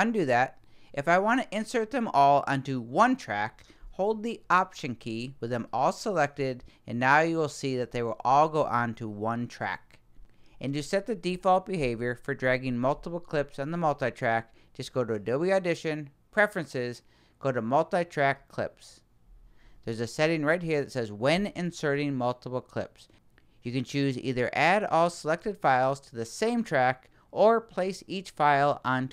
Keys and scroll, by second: 0.0 super+z.